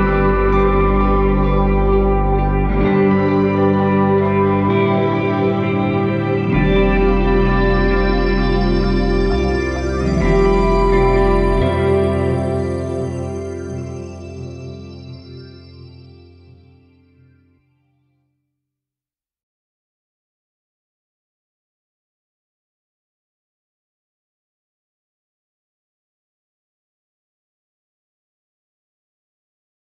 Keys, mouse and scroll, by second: 0.6-2.6 drag, 2.6-3.4 scroll down 5, 3.4-5.2 drag, 5.2-6.5 scroll up 4, 7.0 click, 7.7-8.6 scroll up 9, 8.6-10.7 drag, 10.7-11.9 scroll down 5, 12.7-15.7 drag, 16.2-16.9 scroll down 9, 17.4 click, 18.6-20.8 drag, 20.8-21.9 scroll up 17, 22.6-23.3 scroll down 11, 23.4-28.0 middle drag, 28.0-29.9 drag.